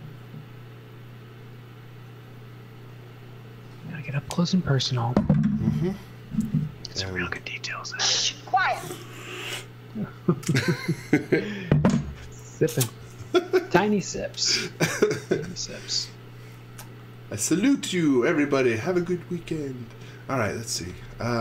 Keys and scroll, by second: 19.0 space, 20.0-21.4 typing.